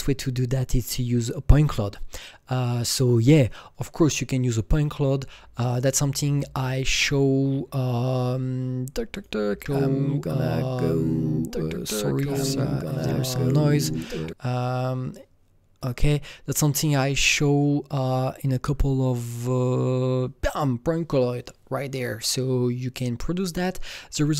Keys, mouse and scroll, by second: 9.1 click, 11.0-11.4 scroll down 3, 11.7 scroll down 2, 12.9 click, 15.8 click, 15.8-16.9 scroll down 1, 18.0-18.4 scroll down 4, 20.5 scroll down 6, 24.3 click, 24.3 scroll down 1.